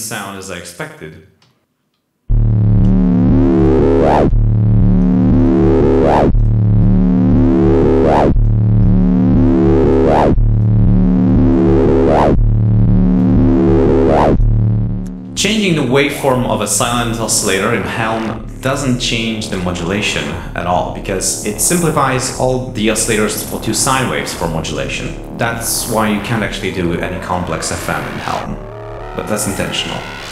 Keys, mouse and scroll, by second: 0.3 l, 1.3 l, 2.2 l, 3.5 click, 3.9 click, 6.7-8.5 drag, 9.7 click, 10.5-13.3 drag, 14.2 click, 21.0-22.5 drag, 22.6-23.6 drag, 25.5-26.6 drag, 28.5 click.